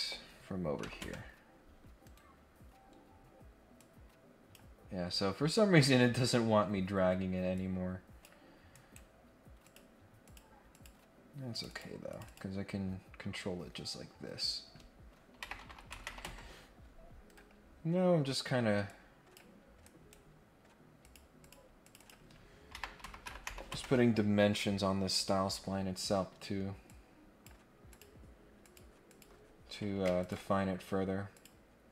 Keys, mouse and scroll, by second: 2.0 Escape, 2.5 scroll down 1, 2.7-3.1 scroll up 2, 3.7 click, 5.6-6.4 scroll down 2, 6.6 scroll up 1, 7.5 click, 8.7 right click, 9.6 click, 10.2 click, 10.7 click, 11.5 click, 11.7 click, 12.1 click, 12.2 click, 13.4-13.9 scroll down 6, 17.2 Escape, 18.8 click, 19.8 right click, 21.0 click, 21.4 click, 21.8 click, 25.9 Escape, 26.8 click, 27.9 click, 28.6 click, 29.0 click, 30.2 ctrl+click, 31.3 click.